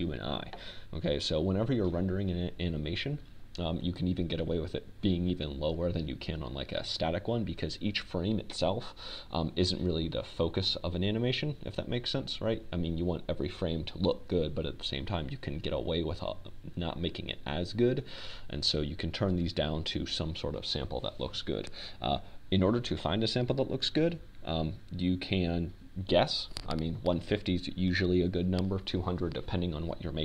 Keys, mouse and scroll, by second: 7.7-12.3 middle drag, 22.5 click, 23.9 click, 24.1 middle click.